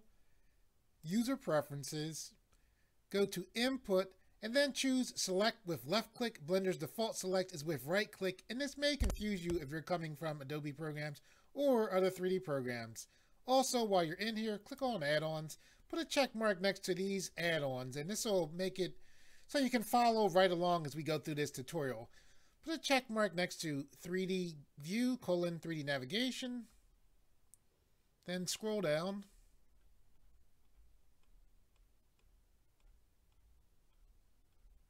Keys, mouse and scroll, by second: 1.0 click, 3.6 click, 14.7 click, 28.3-29.3 scroll down 4.